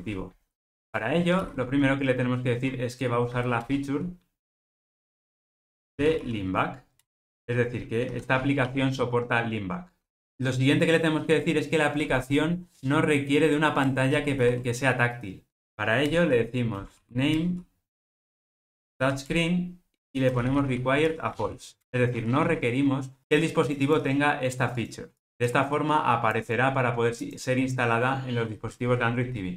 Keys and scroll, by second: 3.7 Return, 16.2 Return.